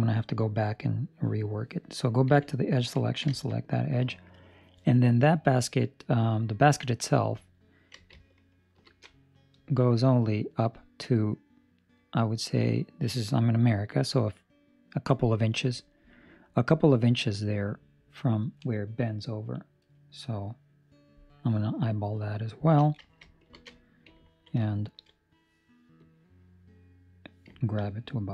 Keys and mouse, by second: 1.0 middle click, 2.2 2, 2.5 right click, 3.0 ctrl+middle click, 3.4 shift+middle click, 23.6 ctrl+alt+shift+5, 24.2 ctrl+middle click, 24.7 shift+middle click, 25.4 ctrl+middle click, 25.9 click, 27.6 ctrl+middle click, 27.8 middle click.